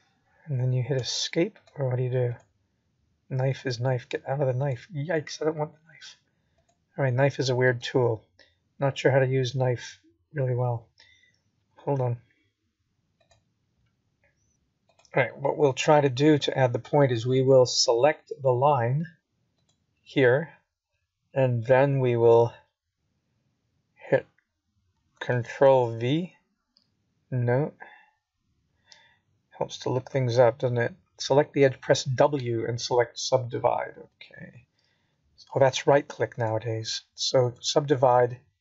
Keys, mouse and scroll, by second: 3.1 middle click, 7.5 click, 19.6 Escape, 20.1 right click, 20.9 click, 28.4 click, 36.7 click, 38.0 click.